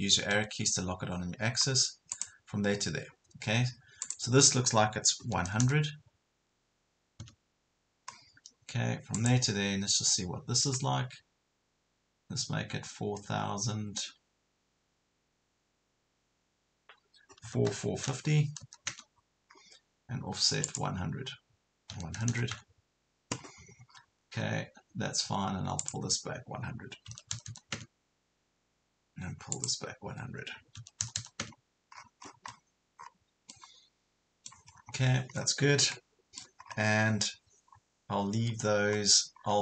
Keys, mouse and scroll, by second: 0.0-0.3 typing, 2.1 click, 2.8 scroll up 1, 4.0 click, 5.3 KP_1, 5.5 KP_0, 8.1 scroll down 1, 9.2 click, 17.4 KP_4, 17.9 KP_5, 18.6 KP_0, 19.6-20.6 scroll up 1, 20.6 click, 21.9 KP_1, 22.2 KP_0, 23.4 scroll down 1, 24.6 scroll up 1, 25.8-26.9 drag, 27.1 KP_1, 27.4 KP_0, 29.6 click, 30.8 KP_1, 31.0 KP_0, 32.1 scroll down 1, 33.0 scroll up 1, 33.5 middle click, 34.7 scroll up 1, 35.4 scroll down 1, 35.9 middle click, 36.6 scroll up 1, 37.2 scroll down 1, 37.7 scroll up 1, 39.0 scroll down 1, 39.4 scroll up 1.